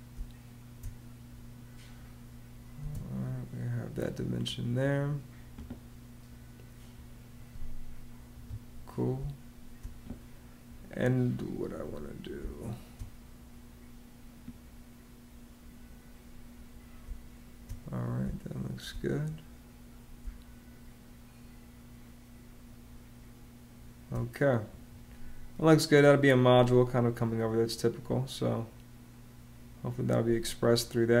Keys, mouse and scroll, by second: 2.6 space, 8.1 Escape, 8.9 space, 12.1 space, 16.8 space, 18.0 space, 20.0 space.